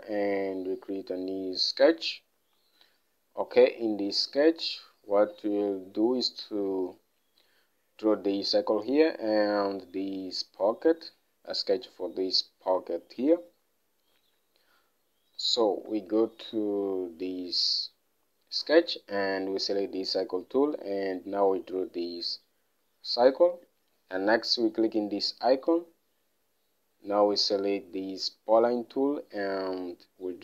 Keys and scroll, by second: 4.7 alt+Tab, 16.4 alt+Tab.